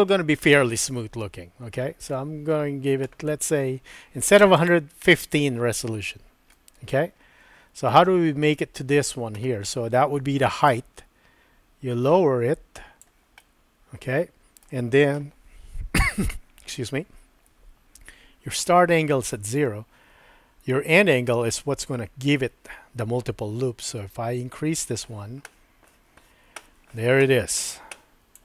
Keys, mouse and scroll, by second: 4.2 click, 4.5 click, 6.6-8.0 middle drag, 10.7-13.0 drag, 13.5-14.7 middle drag, 23.9-28.3 drag.